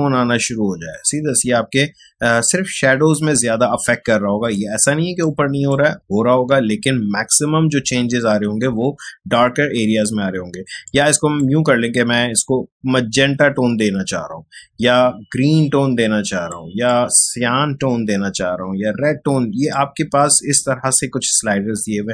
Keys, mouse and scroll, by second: 10.8-22.1 drag.